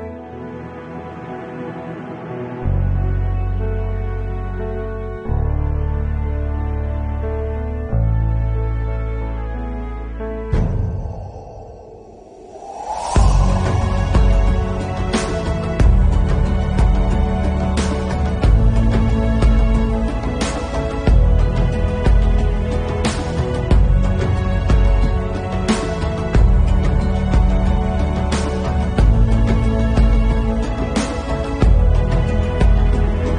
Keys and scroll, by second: 0.9 ctrl+alt+z, 1.4 [, 2.0 ctrl+alt+z, 2.2 3, 5.3 ctrl+s, 7.3 ctrl+alt+z, 8.4 4, 9.1 ctrl+alt+z, 10.1 ctrl+alt+z, 10.5 ctrl+alt+z, 12.8 ctrl+s, 13.6 ctrl+alt+z, 16.1 ctrl+s, 18.0 ctrl+alt+z, 22.4 ctrl+s, 23.3 ctrl+s, 29.8 ctrl+s, 30.4 4.